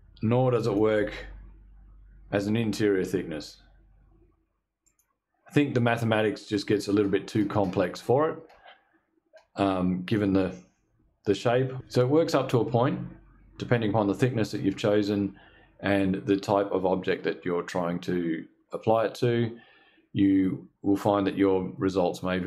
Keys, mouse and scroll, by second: 0.1 click, 4.3 click.